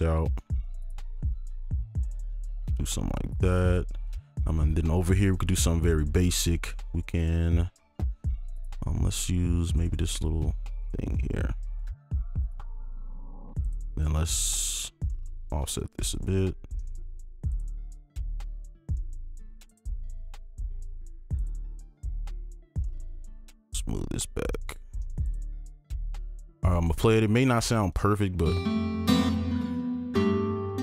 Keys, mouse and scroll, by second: 0.6 click, 0.9 click, 1.7 right click, 1.7 click, 2.0 click, 2.2 click, 8.9-10.9 scroll down 1, 11.4 alt+click, 11.9 alt+right click, 12.8 alt+click, 13.9 ctrl+click, 15.4-15.7 shift+scroll down 1, 15.7 ctrl+click, 15.7-16.0 shift+scroll, 16.0 shift+click, 17.8 shift+click, 18.2 shift+click, 18.7 right click, 18.9 ctrl+click, 19.6 shift+click, 22.2-22.7 scroll down 1, 22.7 scroll down 1, 22.7 right click, 25.0 alt+2, 25.6 alt+click, 26.2 ctrl+right click.